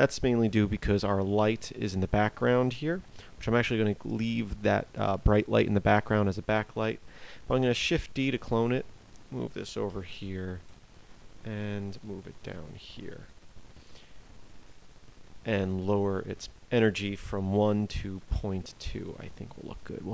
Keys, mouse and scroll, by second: 0.4 KP_7, 2.8 g, 4.9 click, 7.6 shift+d, 9.8 KP_0, 11.0 g, 14.0 g.